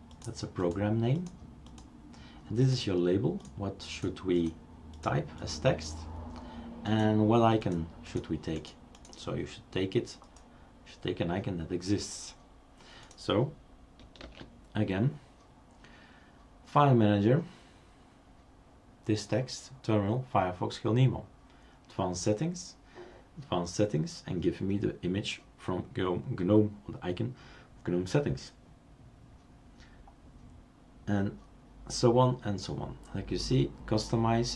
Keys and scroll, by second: 14.2 super+space.